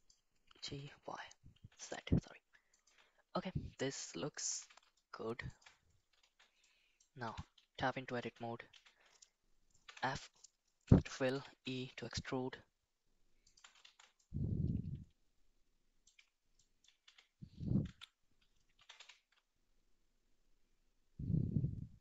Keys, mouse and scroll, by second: 0.5 g, 4.3 g, 6.2 shift+z, 6.6 middle click, 7.2 Tab, 8.2 shift+z, 8.7 a, 9.8 f, 11.4 e, 13.8 shift+z, 14.2-16.1 middle drag, 16.5 middle click, 17.0 a, 17.8 Tab, 18.7 g.